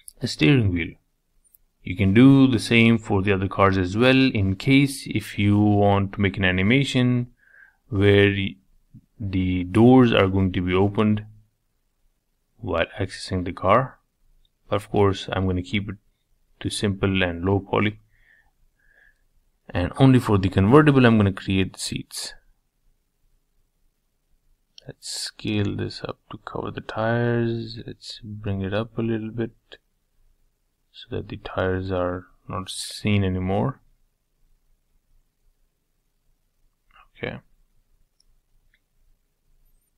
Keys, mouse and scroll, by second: 0.5 KP_7, 2.5 shift+right click, 2.9-5.8 middle drag, 5.8 shift+a, 6.7 s, 8.0 g, 9.8 middle click, 10.4 g, 12.2-13.6 middle drag, 13.6 s, 15.1 g, 17.3-18.4 middle drag, 18.4 KP_7, 18.9-19.7 scroll down 1, 19.7 s, 22.7-24.1 middle drag, 24.1 s, 26.3-28.2 middle drag, 28.7 g, 30.5-32.3 middle drag, 33.2 g, 34.8-36.6 middle drag, 36.6 s, 38.2 s.